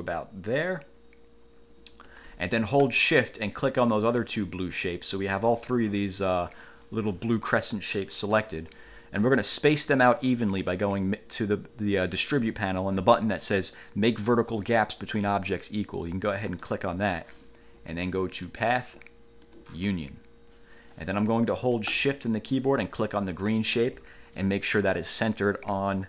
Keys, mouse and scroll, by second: 4.1 shift+click, 4.9 shift+click, 16.9 click, 18.7 click, 19.7 click, 23.3 shift+click.